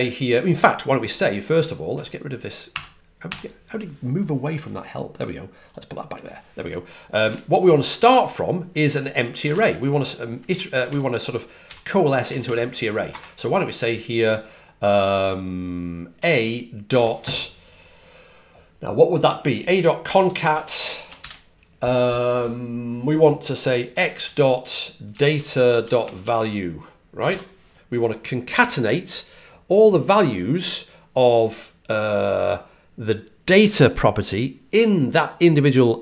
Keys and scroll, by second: 9.4 typing, 10.6-12.3 typing, 19.7-21.3 typing, 24.8-27.7 typing.